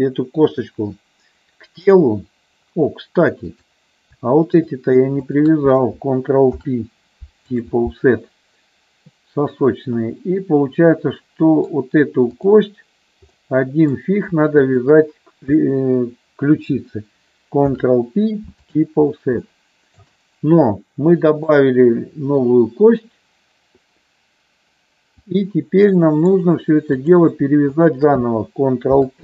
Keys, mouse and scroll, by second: 3.4 click, 5.3 shift+click, 6.5 ctrl+p, 10.0-11.8 middle drag, 12.4 click, 13.3 middle click, 14.5 shift+click, 17.7 ctrl+p, 19.4 middle click, 21.3-25.4 drag, 25.9 middle click, 26.9 click, 27.8 shift+click, 28.9 ctrl+p.